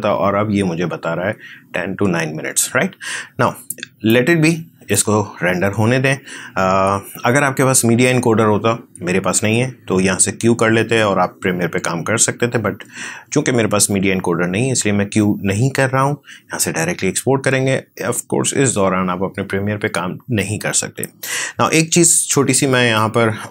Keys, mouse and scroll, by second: 4.0-9.7 drag.